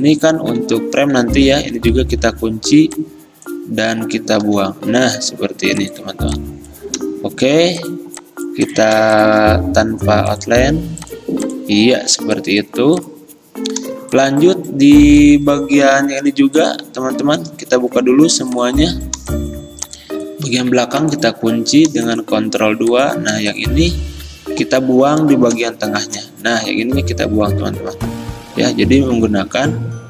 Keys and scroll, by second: 0.7 ctrl+z, 1.7 ctrl+2, 4.5 Delete, 17.9 ctrl+alt+2, 21.1 ctrl+2, 26.1 m.